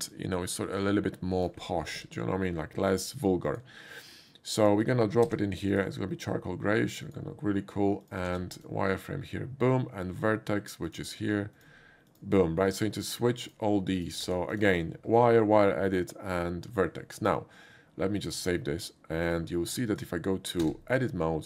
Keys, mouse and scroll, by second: 0.1-1.5 drag, 1.9 ctrl+c, 3.5 click, 4.6 click, 5.3 ctrl+v, 5.7 click, 7.0 click, 8.0 click, 8.6 click, 10.9 ctrl+v, 10.9 click, 11.6 click, 12.1 click, 13.1 click, 13.5 click, 14.0 click, 14.2 ctrl+v, 14.5 click, 18.2 click, 19.2 click, 19.9 click, 20.6 Tab.